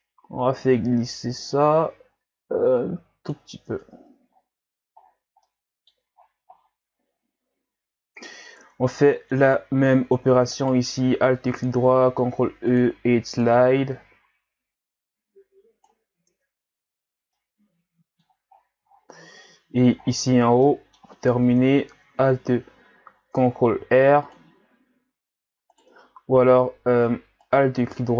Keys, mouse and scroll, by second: 3.9 Tab, 4.4-5.0 scroll down 2, 5.0-5.4 scroll down 2, 5.4-6.2 middle drag, 6.2-7.7 scroll down 10, 8.3-8.6 scroll up 3, 8.6 Tab, 9.0 middle click, 9.5-10.3 scroll up 4, 10.5 alt+right click, 11.7 ctrl+e, 16.6 Tab, 17.0-17.4 scroll down 5, 17.4-18.5 middle drag, 18.5-18.9 scroll down 6, 18.9-19.8 scroll up 14, 20.2-20.7 scroll up 7, 20.7-21.2 middle drag, 21.2 scroll up 1, 21.4 Tab, 23.8 ctrl+r, 26.6 ctrl+z, 27.4 alt+right click.